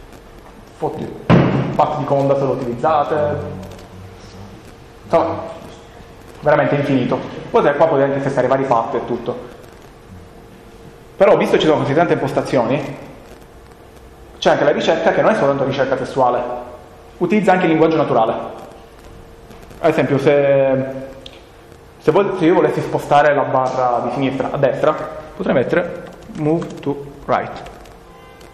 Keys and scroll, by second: 25.4-28.5 typing.